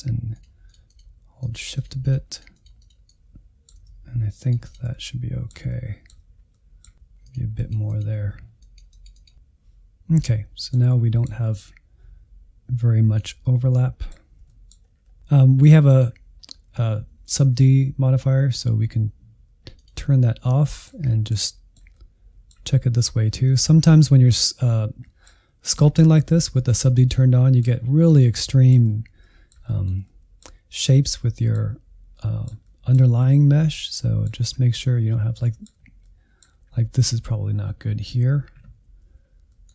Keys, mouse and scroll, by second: 0.8 shift+middle click, 1.5 shift+click, 2.2-3.3 middle drag, 3.3 shift+click, 3.7 middle click, 4.6 scroll down 2, 4.8-6.7 shift+middle drag, 6.7-7.1 scroll up 1, 7.1-8.8 shift+drag, 8.8 shift+middle click, 9.2 scroll down 3, 9.3-13.0 middle drag, 13.0-13.8 scroll up 4, 13.8 shift+click, 14.2 scroll down 1, 14.4-15.9 shift+middle drag, 15.9-20.6 drag, 20.6-23.3 shift+middle drag, 23.3-23.7 scroll up 2, 23.7-25.9 shift+middle drag, 25.9-27.1 scroll up 1, 27.1 middle click, 27.7 scroll up 1, 27.8-28.4 scroll down 5, 28.4 shift+middle click, 29.2-35.0 middle drag, 35.0-35.4 scroll up 3, 35.4 middle click, 35.8 scroll up 1, 36.1 middle click, 36.6-37.3 scroll up 1, 37.3-39.2 scroll up 1, 39.2 scroll down 1, 39.4 middle click.